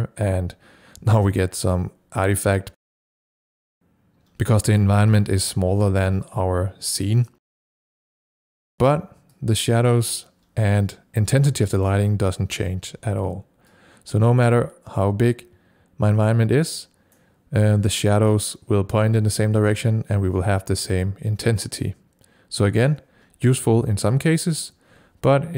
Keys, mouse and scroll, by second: 2.8-4.2 drag, 7.5-12.2 drag, 13.8-25.3 drag.